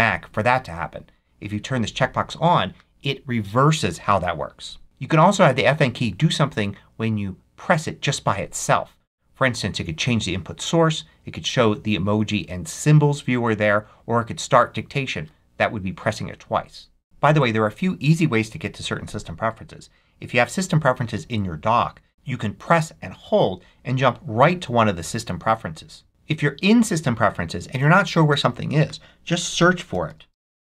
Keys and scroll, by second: 29.8-30.6 typing.